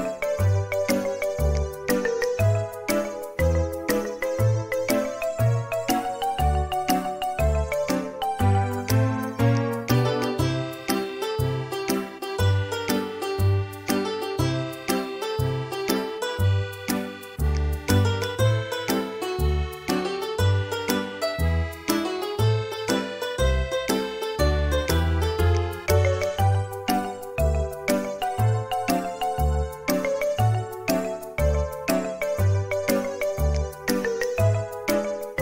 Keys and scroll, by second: 15.6 Escape, 30.1 4, 30.5 4, 33.2-34.1 typing.